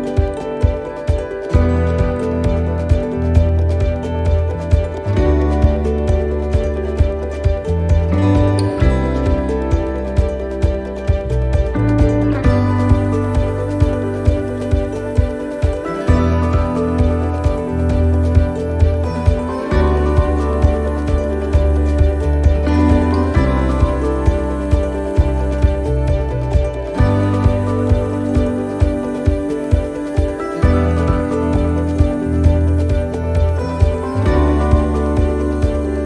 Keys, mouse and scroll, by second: 0.5 middle click, 1.5 scroll up 3, 2.0 shift+middle click, 3.1 e, 4.0 s, 5.5 middle click, 5.8-6.4 scroll down 4, 6.4 middle click, 6.9 scroll up 3, 7.2 middle click, 7.8 scroll down 1, 8.1 middle click, 10.7 click, 13.0-13.3 scroll down 3, 13.7 scroll down 4, 14.3 click, 15.6-16.1 scroll up 8, 16.8 s, 18.8 click, 20.1 middle click, 21.7 scroll down 3, 22.1 middle click, 23.7 l, 24.0 middle click, 25.2 click, 26.9 middle click, 33.0 click, 33.0 middle click, 33.7-34.0 scroll down 2, 34.1 middle click, 34.5 scroll down 1, 34.9 middle click.